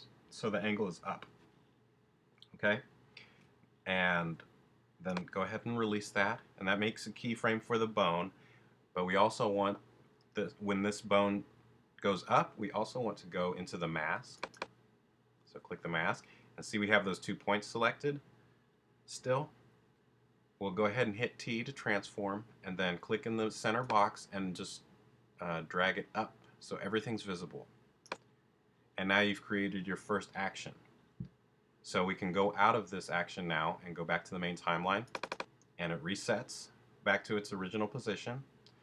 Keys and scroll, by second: 21.8 t.